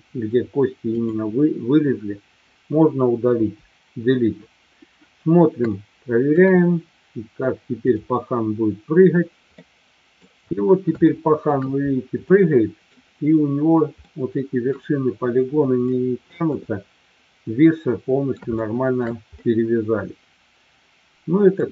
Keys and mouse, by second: 1.7-2.3 drag, 3.6 Delete, 5.7-6.3 middle drag, 8.6 click, 9.6-10.2 middle drag, 11.1 shift+middle click, 12.3-12.9 middle drag, 14.1-14.7 middle drag, 15.9-16.4 middle drag, 17.6-18.3 middle drag, 18.6-19.1 shift+middle drag, 19.3-21.6 middle drag.